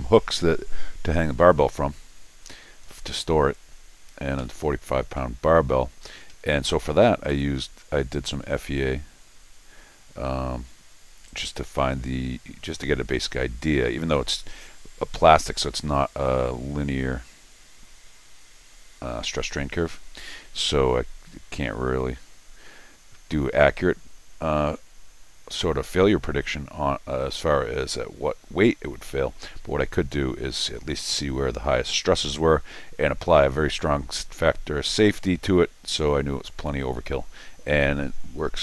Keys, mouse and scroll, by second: 3.7 middle click, 3.7 scroll up 2, 4.4 Escape, 6.3 Escape, 6.4 Escape, 8.1 click, 11.3 click.